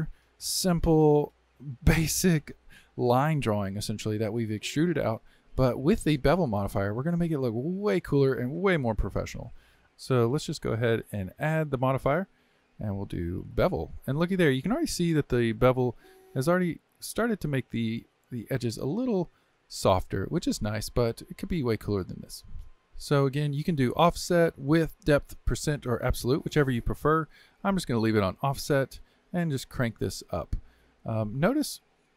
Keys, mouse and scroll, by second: 4.1-9.8 shift+middle drag, 12.0 click, 13.6-14.5 drag, 14.5 scroll up 3, 15.0-15.8 middle drag, 15.8-16.1 scroll up 1, 16.1-16.8 shift+middle drag, 16.8-17.3 scroll up 1, 17.3-20.5 middle drag, 20.5-21.0 scroll down 3, 21.0-22.8 middle drag, 23.9-27.0 drag, 29.1-32.1 drag.